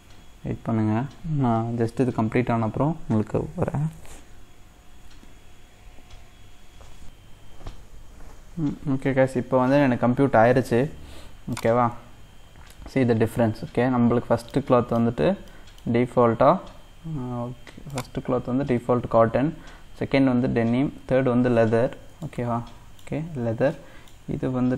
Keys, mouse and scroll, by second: 11.6-14.0 drag, 14.0-14.5 scroll up 3, 14.5 middle click, 15.0-15.5 scroll down 2, 15.5-17.9 middle drag, 17.9-19.7 drag, 19.7-21.0 scroll up 3, 21.0-21.6 scroll up 1, 21.6-22.3 scroll up 1, 22.3-23.3 shift+middle drag, 23.3-23.7 scroll up 3, 23.7-24.7 shift+middle drag.